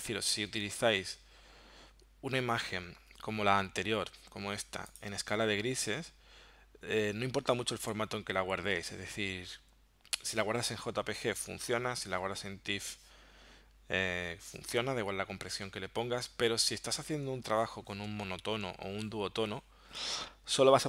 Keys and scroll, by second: 5.1 space, 15.6 space.